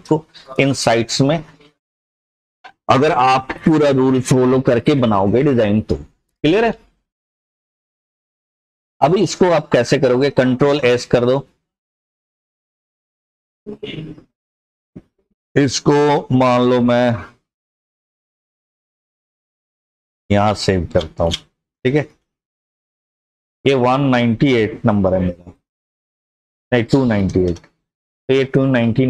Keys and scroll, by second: 12.4 ctrl+s, 27.2 BackSpace, 27.4 BackSpace, 28.8 typing.